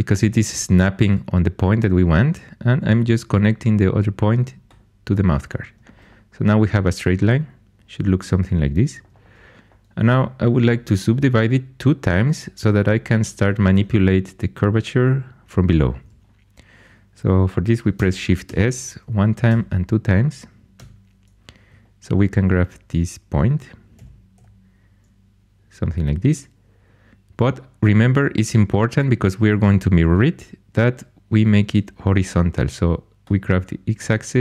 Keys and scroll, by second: 18.4 shift+s, 19.4 shift+s, 20.7 1, 23.9-24.3 typing.